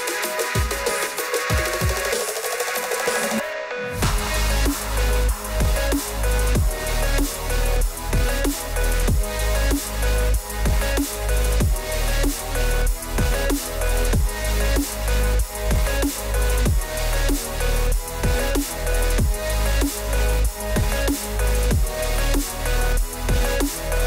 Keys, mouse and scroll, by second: 0.0 click, 5.2 click, 7.6 click, 10.6 alt+r, 11.6 middle click, 12.2 scroll, 13.9 click, 13.9 scroll, 14.9-15.2 typing, 16.0 Return, 16.6 click, 18.9 click, 20.9 alt+r, 23.6 click.